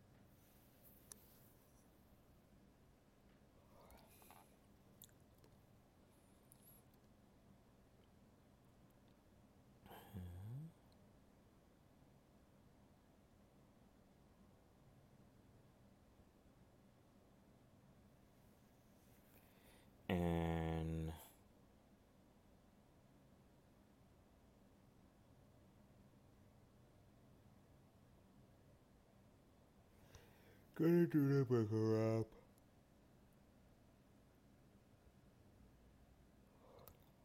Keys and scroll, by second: 7.7 ctrl+z, 18.3 alt+space, 21.4 ctrl+z, 22.7 alt+space, 25.4 alt+space, 30.1 alt+space, 36.3 alt+space.